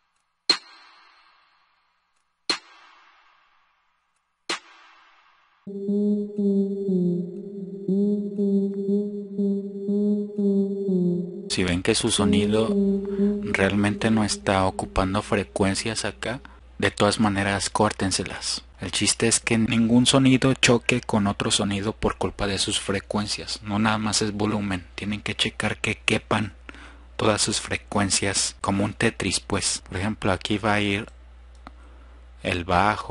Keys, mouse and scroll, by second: 1.2 F1, 5.0 click, 11.2 click.